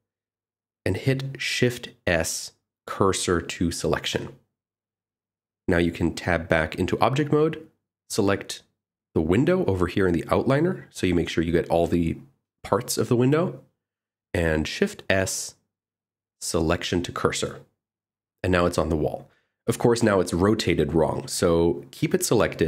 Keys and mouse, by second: 0.9 click, 2.7 shift+s, 7.4 Tab, 10.6 click, 13.8 shift+s, 17.7 shift+middle drag.